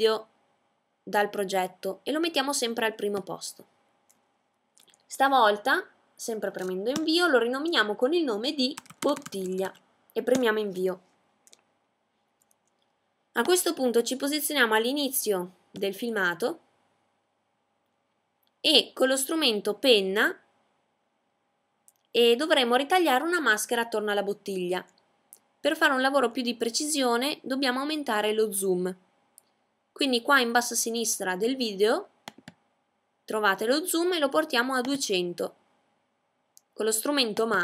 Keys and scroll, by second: 7.7 typing, 9.7 typing.